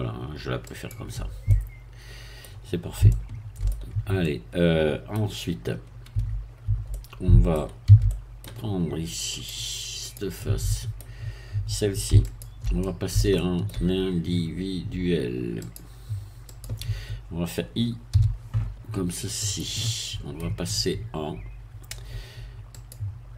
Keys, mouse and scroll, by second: 0.7 click, 1.5-2.6 middle drag, 3.1 shift+middle click, 4.2-5.3 middle drag, 6.1 Tab, 6.9 middle click, 7.9 a, 8.0 middle click, 9.4 click, 10.4 middle click, 12.2 shift+click, 12.8-13.9 shift+middle drag, 15.6 click, 16.5-18.1 drag, 18.1 i, 19.4 click, 19.8 middle click, 22.8 click.